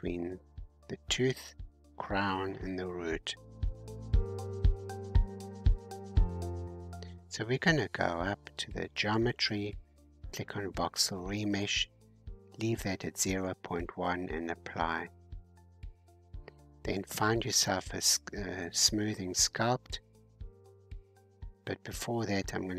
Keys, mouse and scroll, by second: 1.9-2.8 scroll down 1, 2.8-5.9 middle drag, 6.2-6.7 scroll up 10, 9.8-11.4 drag, 11.4 scroll up 3, 13.0-14.1 drag, 14.1 scroll down 2, 16.2-16.6 scroll down 5, 17.2-17.7 scroll down 1, 17.7 scroll down 2, 18.6-20.7 drag, 20.7-22.6 scroll up 3, 22.6 g.